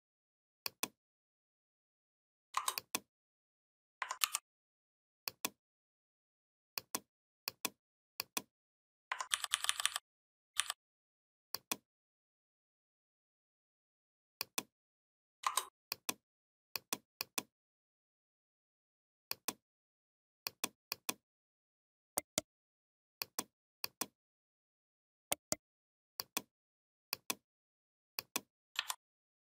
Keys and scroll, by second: 4.0 ctrl+g, 9.1 ctrl+[, 10.4 ctrl+[, 28.6 3.